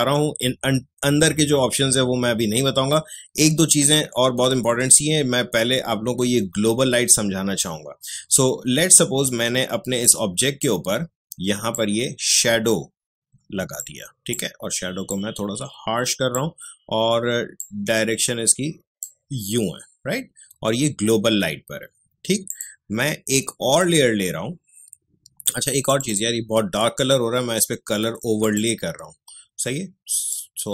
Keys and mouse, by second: 9.2-21.4 drag, 22.4 click, 25.8 click, 28.4-30.7 drag.